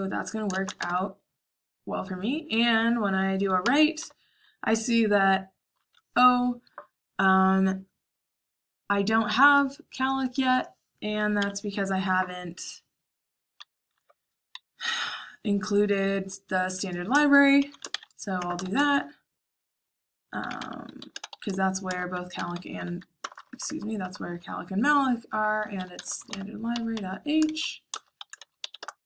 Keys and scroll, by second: 0.4-1.1 typing, 3.6-3.9 typing, 11.3 Escape, 11.6-14.6 typing, 17.5 i, 17.8 shift+2, 18.3 BackSpace, 18.5 shift+3, 20.1-29.0 typing, 27.8 Return.